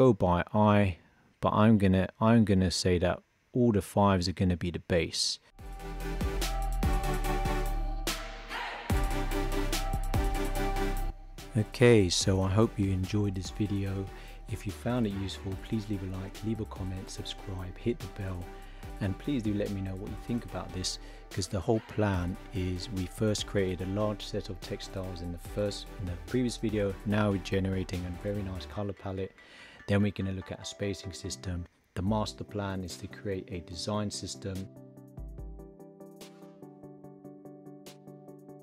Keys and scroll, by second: 6.1 shift+b, 7.3 shift+b, 8.0 shift+b, 8.9 shift+b, 9.9 shift+b.